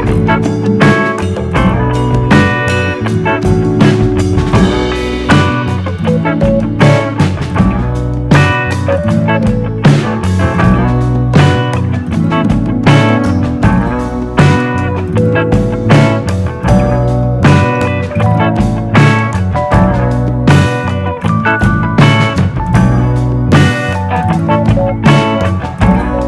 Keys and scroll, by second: 4.7 super+d.